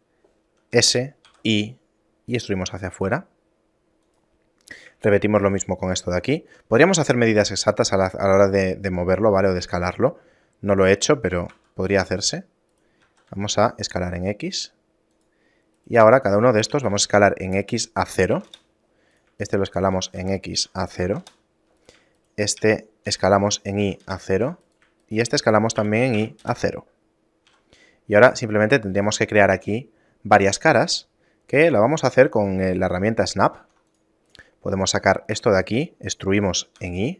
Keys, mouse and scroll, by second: 4.9 right click, 5.1 shift+right click, 5.7 shift+right click, 6.1 shift+right click, 11.7 e, 13.1 s, 15.9 right click, 16.3 shift+right click, 16.9 s, 19.3 right click, 19.5 shift+right click, 20.1 s, 21.9 right click, 22.3 shift+right click, 22.7 s, 24.8 right click, 25.1 shift+right click, 25.5 s, 27.3 middle click, 27.6 a, 28.5 right click, 29.1 a, 29.5 scroll up 1, 31.0 scroll up 1, 32.0 click, 33.7 ctrl+Tab, 34.4 right click, 35.5 e.